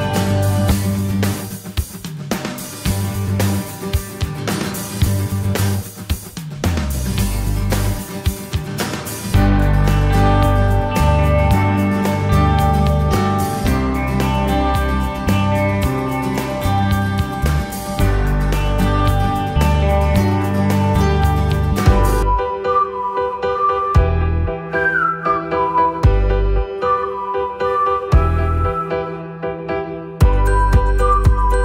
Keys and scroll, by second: 16.4 F4.